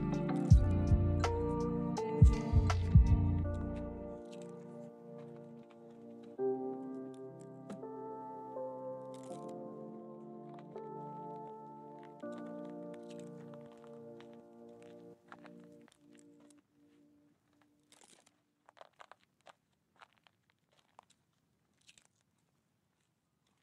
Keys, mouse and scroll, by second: 3.0 shift+middle click, 3.3 shift+middle click, 6.2 shift+middle click, 8.0 ctrl+z, 9.8 shift+middle click, 12.8 shift+middle click, 13.8 ctrl+z, 15.6 middle click, 16.9 shift+middle click, 17.2 shift+scroll down 1, 17.3 shift+middle click, 23.2 shift+middle click.